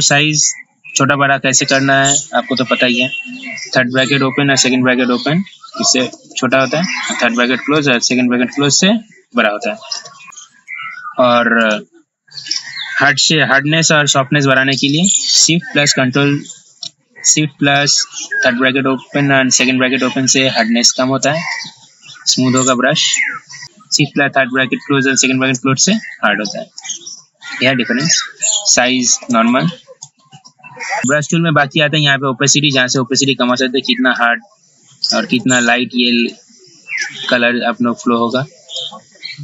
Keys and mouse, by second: 9.8 p, 11.8 click, 21.7-23.0 drag, 26.1-39.4 drag.